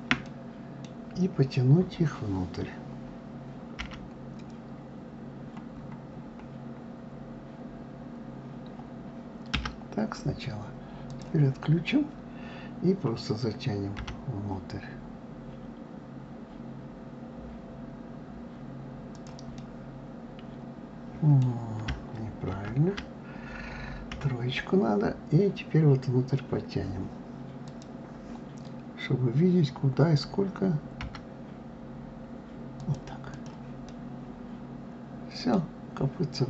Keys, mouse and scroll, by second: 0.0-3.0 middle drag, 10.9 click, 13.8 g, 19.4-22.2 middle drag, 22.2 ctrl+z, 23.9 KP_3, 27.4 click, 33.1 click, 33.7-35.5 middle drag, 35.5 scroll down 2.